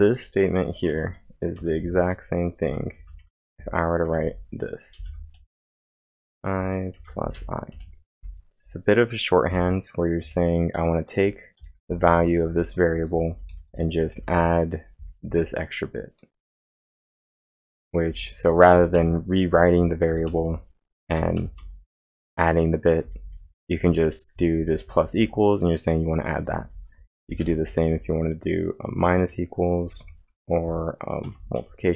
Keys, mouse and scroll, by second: 0.9-8.2 typing, 10.0-15.3 typing, 28.8-29.5 typing, 31.0-31.9 typing.